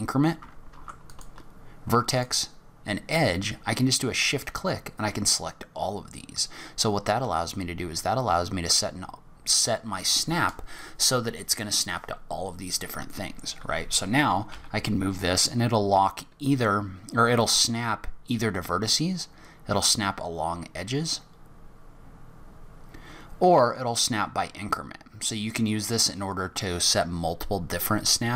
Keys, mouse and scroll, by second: 13.1 click, 14.5 g.